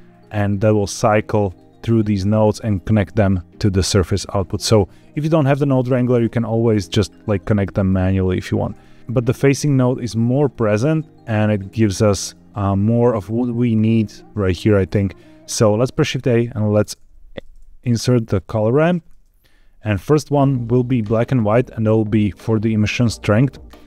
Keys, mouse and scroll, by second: 0.0 ctrl+shift+click, 1.4 ctrl+shift+click, 5.2-7.8 drag, 9.0-9.3 middle drag, 9.0 ctrl+shift+click, 9.4 scroll down 2, 10.1 shift+middle click, 10.4-11.5 middle drag, 11.9 shift+middle click, 14.4 click, 15.9 shift+a.